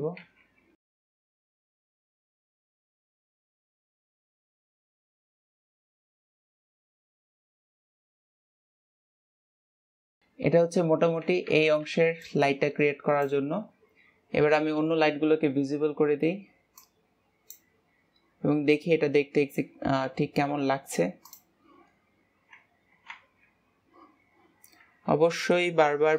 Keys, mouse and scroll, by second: 0.7 Escape, 1.4 click, 1.6 middle drag, 1.8-5.3 typing, 3.4 scroll down 1, 5.7 click, 17.3-18.7 drag, 18.7-19.6 scroll down 11, 21.8 click, 23.6 ctrl+s.